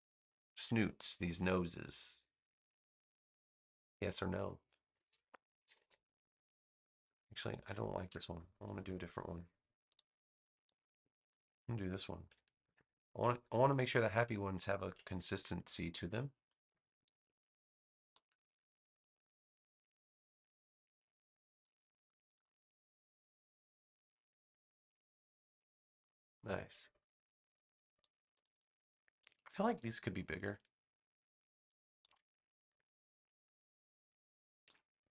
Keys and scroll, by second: 5.5 a, 8.0 BackSpace, 8.9 space, 12.6 super+c, 13.1 space, 15.2 super+v, 18.4 a.